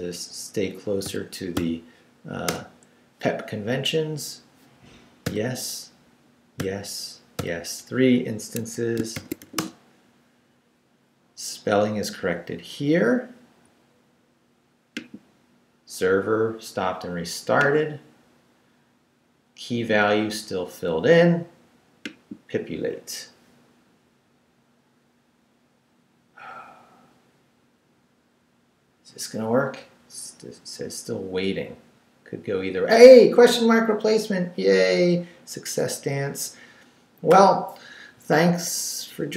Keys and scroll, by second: 1.0 g, 1.5 c, 2.5 Return, 5.2 y, 6.6 y, 8.5 Escape, 9.1 shift+;, 9.4 shift+w, 9.6 Return.